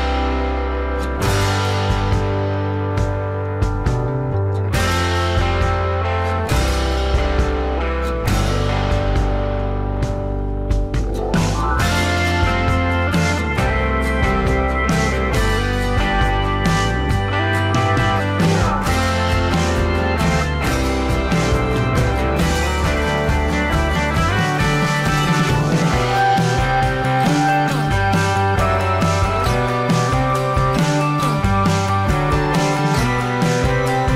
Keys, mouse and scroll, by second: 1.4 alt+shift+click, 3.7 alt+scroll down 1, 3.8 space, 16.5-17.0 alt+scroll up 1, 23.8 ctrl+z, 31.3 space.